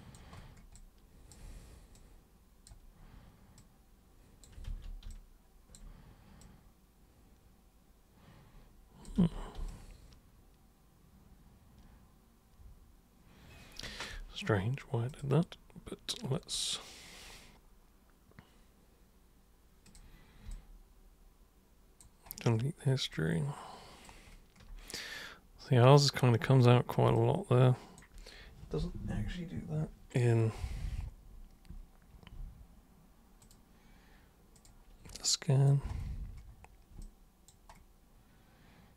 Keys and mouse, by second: 0.7 alt+super+click, 2.0 super+click, 3.6 super+click, 4.6 ctrl+super+z, 5.1 alt+super+click, 6.4-9.0 super+drag, 9.2 ctrl+super+z, 9.7-14.0 alt+super+drag, 15.1 super+click, 19.9 super+click, 20.5-22.0 alt+super+drag, 23.1 alt+super+click, 27.2-28.0 alt+super+drag, 33.4 super+click, 34.5 super+click, 35.2 alt+super+click, 37.0 alt+super+click.